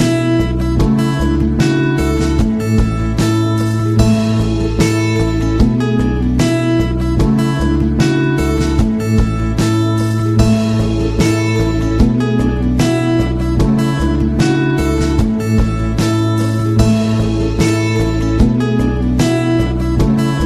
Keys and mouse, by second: 0.6-0.9 middle drag, 4.9 z, 5.8 shift+a, 8.2 g, 8.8 r, 9.8 s, 10.9 KP_3, 11.7 r, 12.7 g, 13.4 KP_1, 14.1 middle click, 14.7 r, 15.4 g, 16.0 z, 17.7-18.2 middle drag.